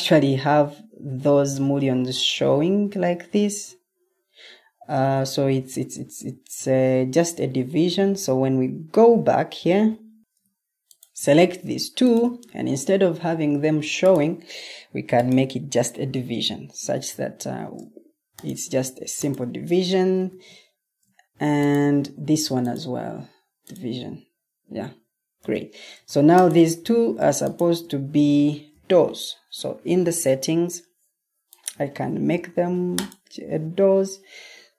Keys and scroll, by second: 17.1 Escape, 20.2 Escape, 25.3 v, 28.6 ctrl+t.